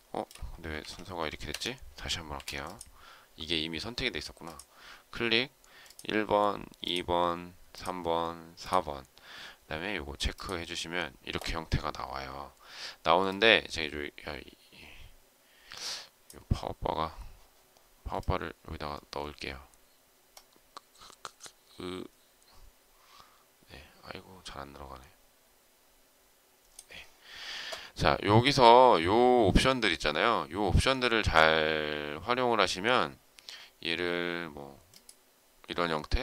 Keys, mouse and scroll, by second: 0.7 ctrl+z, 1.4 Escape, 2.1 space, 2.3 Escape.